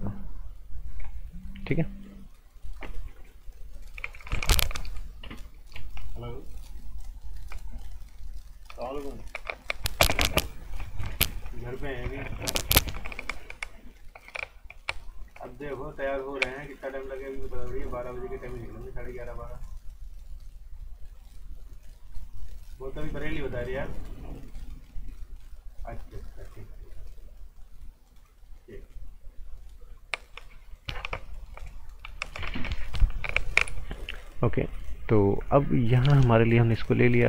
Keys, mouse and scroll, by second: 35.1-36.5 scroll up 1, 36.5 click.